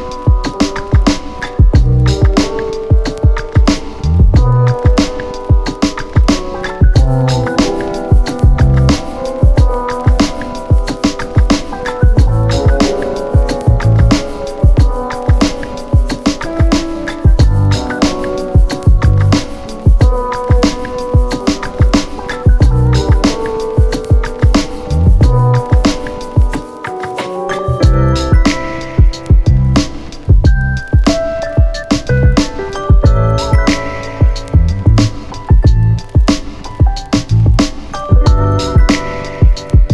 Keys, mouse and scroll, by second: 0.0 click, 1.9 click, 7.0 click, 9.1 right click, 11.4 click, 14.2-17.0 typing, 18.2 click, 24.5 click, 26.4 click, 28.8-30.3 typing, 31.4-32.9 click.